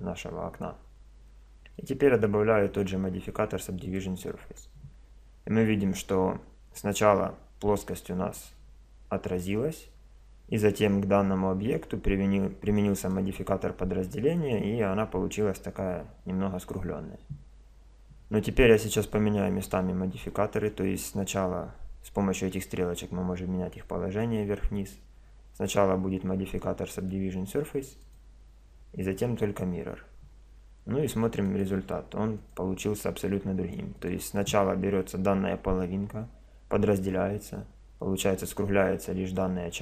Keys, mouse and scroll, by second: 1.8-3.4 drag, 8.4-10.2 drag, 13.0-14.8 drag, 28.0-29.7 drag, 31.4-35.8 drag.